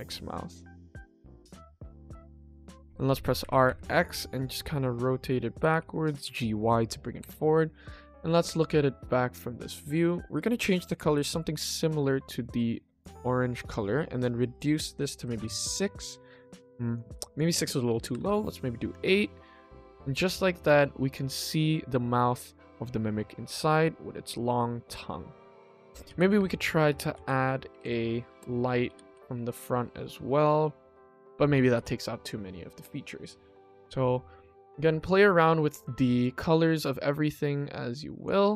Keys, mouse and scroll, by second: 0.0-0.6 scroll up 2, 0.6-1.6 middle drag, 2.3 r, 7.8 click, 8.2 ctrl+s, 8.4 click, 9.3 click, 10.0 click, 14.5 click, 16.5 click, 17.3 click, 18.9 click, 19.1 ctrl+s, 20.6 click, 21.1 click, 25.4 click, 26.1 shift+d, 26.9 r, 32.2 click, 32.6 click, 33.6 click, 36.1 click, 36.8 click.